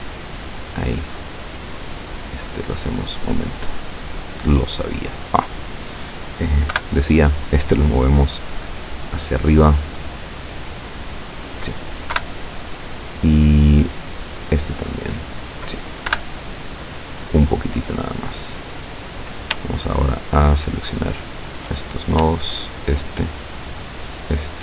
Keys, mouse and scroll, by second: 2.0 right click, 2.6 click, 3.2 middle click, 4.4 right click, 5.4 right click, 6.0 middle click, 6.8 KP_7, 8.0-10.0 drag, 10.9-11.9 middle drag, 12.2 KP_7, 14.3 right click, 14.8 middle click, 16.1 KP_7, 17.0-18.4 drag, 19.9 shift+right click, 21.1 shift+right click, 22.7 shift+right click, 24.0 shift+right click.